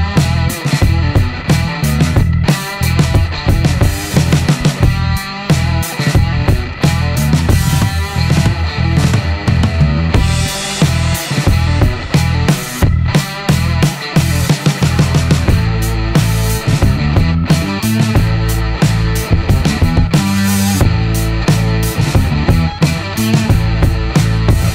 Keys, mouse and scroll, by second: 1.0 shift+r, 4.0-5.3 typing, 6.1-6.6 scroll down 1, 7.7-9.0 middle drag, 9.3-12.5 middle drag, 13.8 click, 15.3 click, 16.0 click, 18.7 ctrl+s, 20.9 click, 23.0 click, 23.1 click.